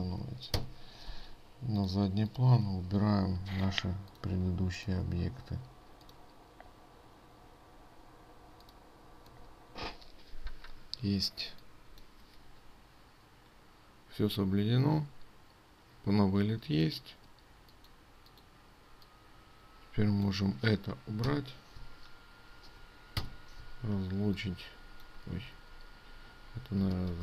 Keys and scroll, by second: 25.9 ctrl+z.